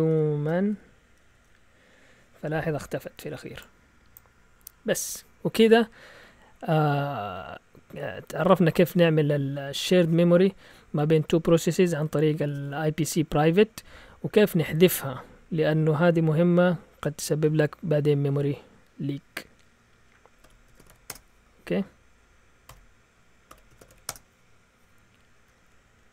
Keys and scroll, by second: 0.0-1.8 typing, 20.2-21.4 typing, 22.7-24.6 typing.